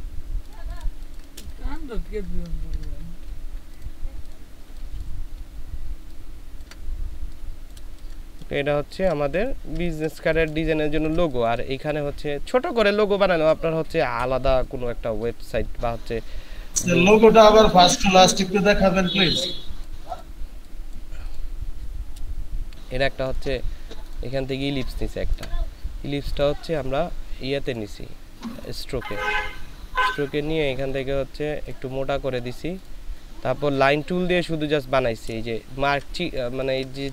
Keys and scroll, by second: 0.9 ctrl+space, 7.8 ctrl+space, 8.7 ctrl+space, 35.6 ctrl+space, 36.4 ctrl+space.